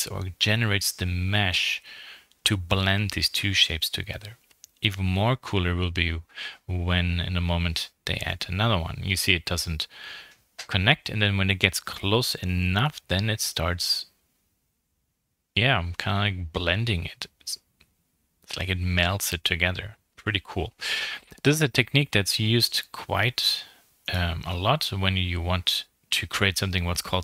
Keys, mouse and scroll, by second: 1.4 click, 2.4 KP_3, 3.4 scroll up 3, 3.8 shift+middle click, 4.4 scroll down 4, 6.9 shift+d, 8.2 scroll up 3, 9.3 shift+middle click, 9.8 g, 14.6 r, 15.8 g, 17.2 r, 18.0 g, 19.2 shift+click, 19.4 g, 20.8 click, 21.0 g, 23.2 click, 23.4 middle click.